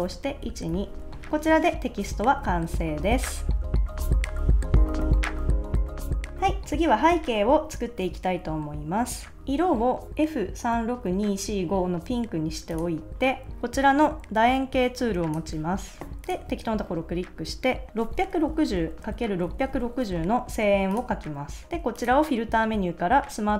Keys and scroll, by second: 0.4 shift+Down, 18.2-19.6 typing.